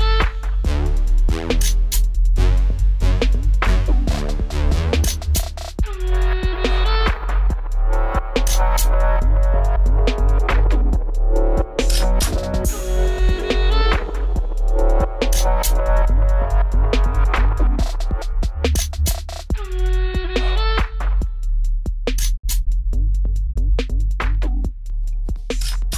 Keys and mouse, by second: 1.1 w, 2.9-4.4 right drag, 4.4 click, 4.4 w, 6.9-8.9 drag, 9.2-10.4 drag, 9.8 w, 11.2 w, 13.8 w, 14.1 middle click, 15.2-17.3 drag, 17.3 middle click, 17.6 click, 18.2 middle click, 18.6 click, 19.0 right click, 19.8 click, 23.7 w, 25.5 click, 25.8-25.9 drag.